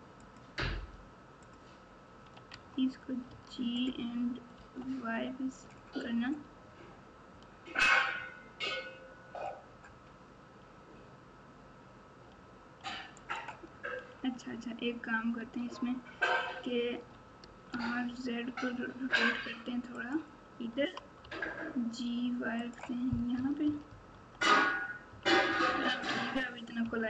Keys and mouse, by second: 0.2 alt+click, 2.5 alt+z, 3.2 g, 15.3 Tab, 16.9 r, 20.7 g, 23.3-25.7 typing, 26.8 KP_1.